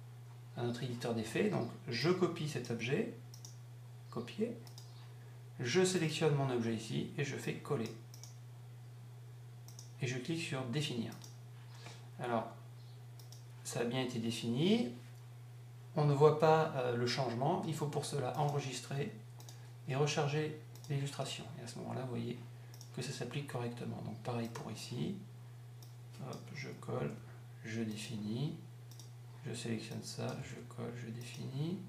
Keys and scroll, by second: 26.6 Up, 30.3 Up.